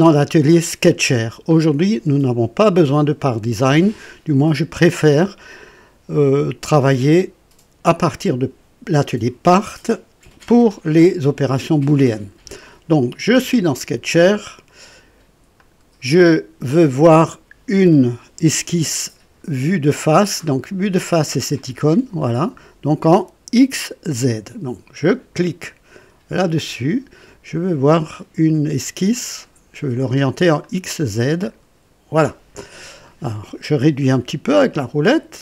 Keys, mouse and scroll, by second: 0.9 click, 15.5 click, 21.5 click, 26.3 click, 30.6 click, 31.4 click, 33.0 right click, 34.2-34.8 scroll down 3, 35.3 right click.